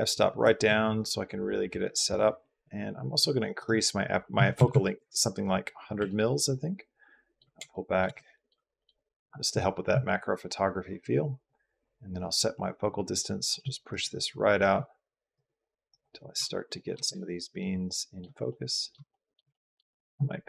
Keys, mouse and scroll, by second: 1.0-2.0 drag, 3.5-5.0 drag, 4.5 KP_0, 6.0 ctrl+click, 8.7 middle click, 12.1-13.2 middle drag, 13.8 middle click, 15.2 middle click, 16.6 shift+click, 19.5 click.